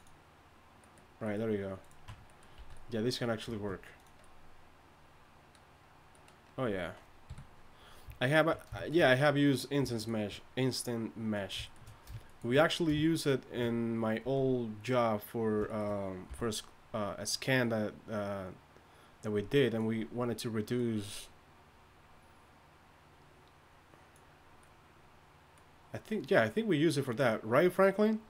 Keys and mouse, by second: 2.1 Tab, 3.5 ctrl+Tab, 3.5 a, 7.3 KP_3, 8.2 click, 8.9 click, 14.2 z, 16.3 c.